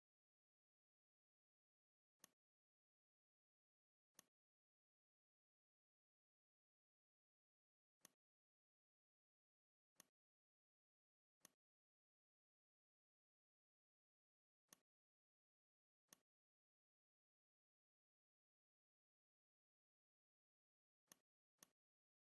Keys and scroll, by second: 2.0 space, 3.4 l, 7.6 z.